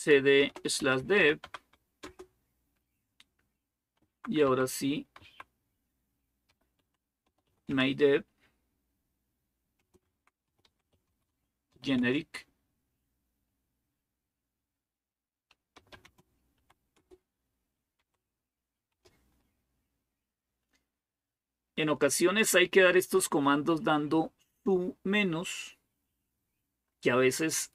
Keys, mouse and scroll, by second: 0.0-2.3 typing, 3.6-5.0 typing, 6.0-12.0 typing, 15.3-18.7 typing.